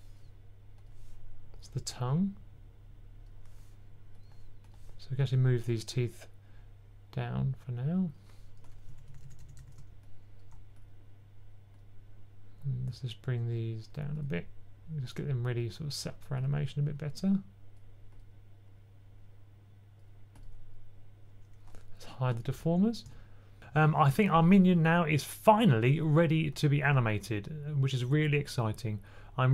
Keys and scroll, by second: 8.8-9.4 typing.